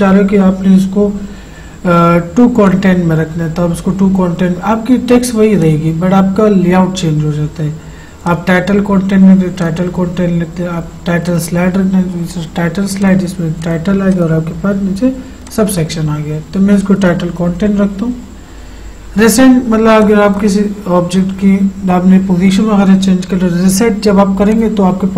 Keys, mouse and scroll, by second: 2.7 click, 5.6 click, 8.3 click, 20.0-22.6 drag, 24.6 click.